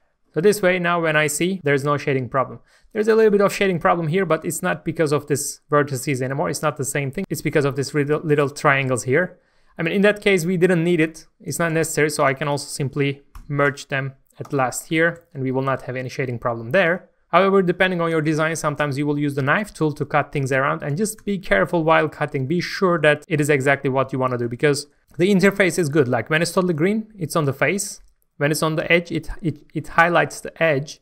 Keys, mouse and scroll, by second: 0.5-2.4 middle drag, 2.4 scroll up 1, 3.1 shift+middle click, 4.1-5.3 scroll up 1, 5.3 Tab, 6.4 scroll down 1, 6.8 shift+middle click, 9.7-11.6 scroll down 1, 11.6-12.2 scroll up 1, 12.2 click, 12.5 shift+click, 13.3 m, 14.4 click, 14.9 alt+a, 15.2 scroll down 1, 15.6-18.9 middle drag, 21.2 Tab, 21.4 scroll up 1, 21.8 shift+middle click, 22.7 alt+a, 24.3 scroll up 1, 24.6 shift+middle click, 25.0 k.